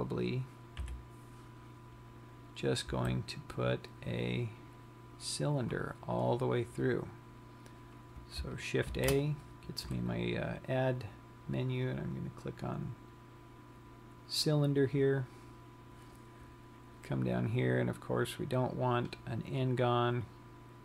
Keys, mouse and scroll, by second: 1.1 KP_3, 3.7 z, 9.5 shift+a, 18.2 click, 19.7 click.